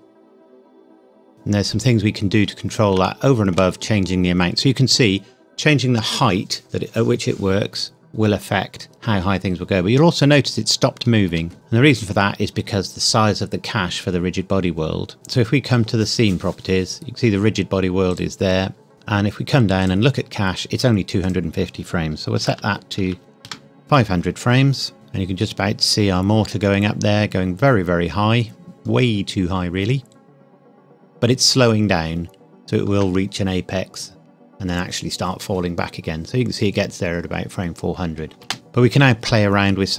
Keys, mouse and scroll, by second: 0.2-0.6 scroll down 1, 1.8 scroll down 1, 3.0 shift+middle click, 11.2 space, 15.1 click, 18.1 click, 18.9 scroll up 1, 19.1-19.8 scroll down 1, 19.8 click, 20.3-21.2 scroll down 1, 21.2 click, 22.3 KP_5, 22.5 KP_0, 23.4 KP_Enter, 24.9-25.8 scroll up 1, 38.3 space.